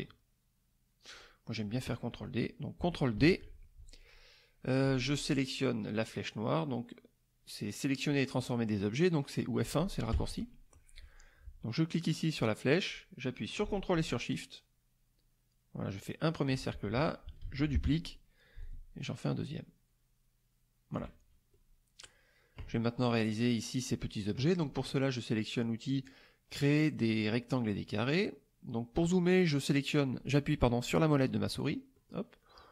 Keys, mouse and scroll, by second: 1.1 click, 3.2 ctrl+d, 10.1 F1, 12.1-16.6 drag, 17.4 ctrl+d, 18.6-21.1 ctrl+shift+drag, 21.5-22.2 ctrl+shift+middle drag, 25.9 click, 31.5 middle click, 31.9 middle click.